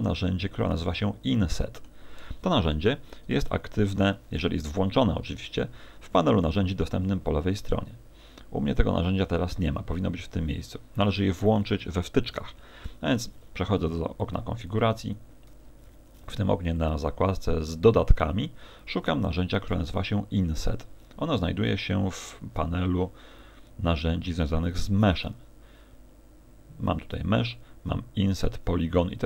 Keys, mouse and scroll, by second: 1.4 middle click, 3.5 t, 7.0 scroll down 2, 12.6 ctrl+alt+u.